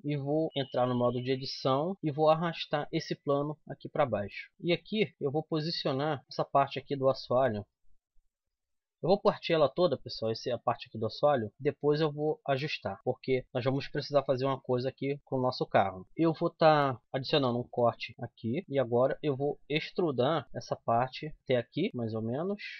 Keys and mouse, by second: 0.8 Tab, 1.8 z, 2.6 g, 4.5-5.6 drag, 4.9 g, 6.7-8.4 middle drag, 8.4 c, 8.6-10.0 middle drag, 10.0 click, 10.5 middle click, 11.3 right click, 11.5-13.0 drag, 13.4-15.4 drag, 15.4 middle click, 17.2 ctrl+r, 18.8-20.4 drag, 20.4 e.